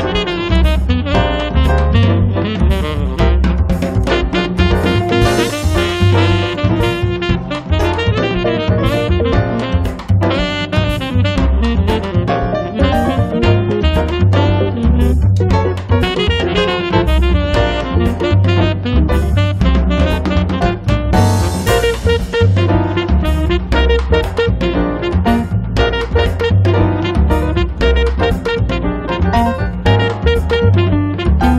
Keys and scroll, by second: 7.5 space, 8.1 Escape, 16.4 space, 16.9 Escape, 19.8 p, 21.9-22.9 typing, 25.9 space, 26.9 Escape, 28.2 p, 30.7 5, 30.9 Return.